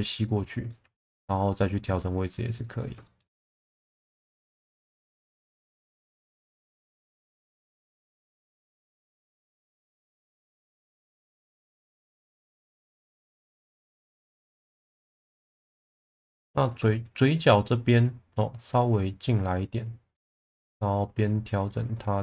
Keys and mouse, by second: 0.6 alt+middle click, 1.6 click, 3.0 shift+middle drag, 3.5 2, 3.7 click, 4.0-5.0 right drag, 5.2 1, 5.7 click, 6.8 click, 8.6 click, 9.5 ctrl+z, 10.0 shift+Tab, 13.6 middle click, 14.9 shift+middle click, 17.8 click, 21.0 click.